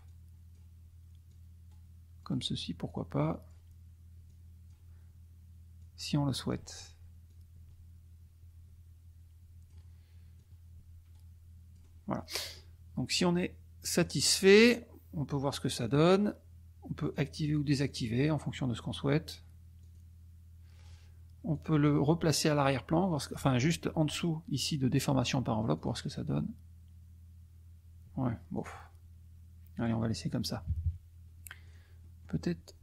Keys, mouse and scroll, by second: 0.0 click, 1.2 click, 1.7-2.6 scroll up 2, 2.8 click, 4.2 click, 5.7 click, 7.2-9.9 drag, 10.3 click, 11.1-12.0 scroll down 2, 12.4 click, 13.9 click, 14.6 click, 15.8 click, 17.0 click, 17.8 click, 19.8 click, 21.5-21.9 drag, 25.7 click, 28.5 click, 29.9 click, 30.6 KP_Subtract, 31.6 click, 32.1-32.8 middle drag.